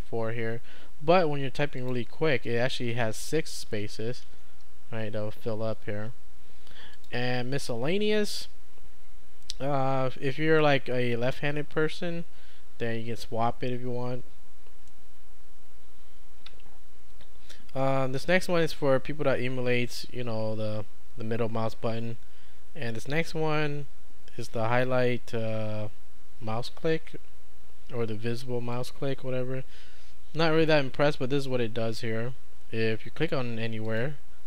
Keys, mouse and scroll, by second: 1.8 click, 2.5-4.9 typing, 7.0 click, 28.7 click, 33.9 click.